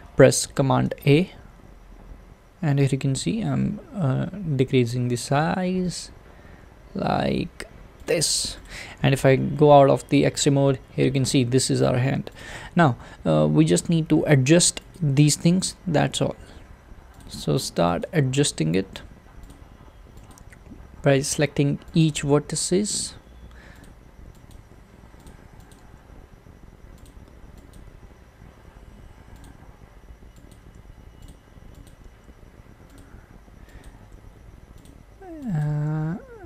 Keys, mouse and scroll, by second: 0.9 a, 8.7 click, 9.8 alt+z, 11.7 alt+z, 15.0 click, 15.8 g, 18.0 click, 18.1 g, 20.3 click, 20.4 g, 22.0 click, 22.2 g, 24.5 click, 25.8 g, 30.5 click, 30.6 g, 31.9 click, 32.2 g, 33.8 click, 34.1 g, 35.6 click, 35.8 g.